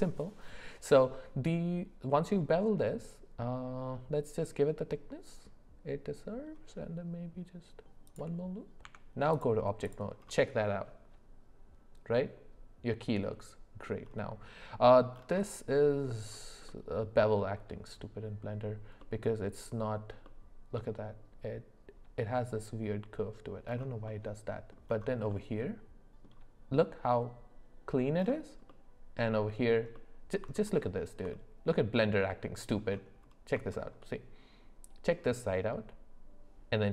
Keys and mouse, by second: 8.8 Tab, 9.8 click, 10.7-13.9 middle drag, 16.7 middle click, 19.0 middle click, 20.2 middle click, 24.1 middle click, 25.3 middle click, 28.7 middle click, 29.9 middle click, 33.7 shift+middle click.